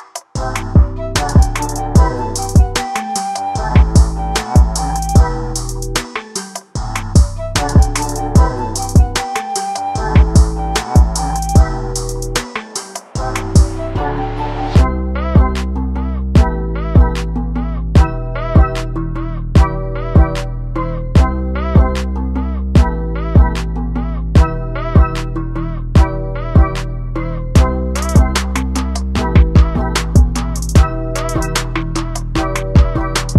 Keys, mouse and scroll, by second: 0.0 ctrl+space, 0.1 scroll down 2, 0.2 middle click, 0.4 scroll up 2, 0.5 middle click, 0.7 scroll down 1, 1.2-2.5 drag, 3.4 middle click, 3.8 KP_1, 4.1 KP_3, 4.5 shift+right click, 5.4 click, 5.5-5.9 scroll down 9, 5.9 click, 6.2 scroll up 1, 6.4 right click, 7.0-7.5 scroll up 13, 7.6-8.0 scroll down 3, 8.0-8.5 scroll up 1, 8.5 click, 11.7-14.8 right drag, 14.8 f, 15.3 shift+f, 15.7 click, 17.9 click, 18.8 click, 19.9 f, 20.3 click, 22.6 f, 22.8 click, 24.6 click.